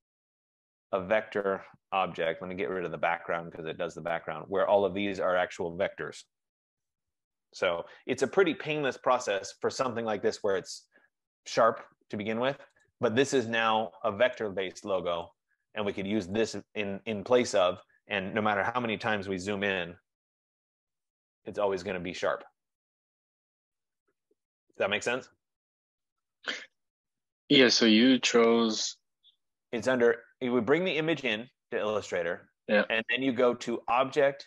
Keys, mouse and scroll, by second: 0.1 click, 0.4 click, 3.8 click, 5.0 click, 5.5 F15, 8.0 ctrl+=, 8.5 ctrl+=, 8.9 ctrl+=, 10.8 click, 13.0 click, 15.5 click, 16.7 click, 20.0 ctrl+=, 20.2 ctrl+=, 20.7 ctrl+=, 20.9 ctrl+=, 21.1 ctrl+=, 21.5 ctrl+=, 22.9 ctrl+-, 22.9 ctrl+-, 23.1 ctrl+-, 23.3 ctrl+-, 23.5 ctrl+-, 24.1 ctrl+-, 29.1 click, 34.0 click.